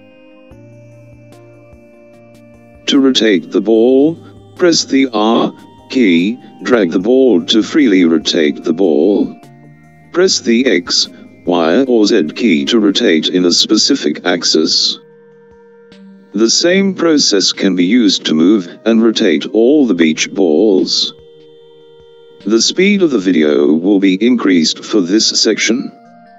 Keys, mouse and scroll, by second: 4.8 r, 14.4 r.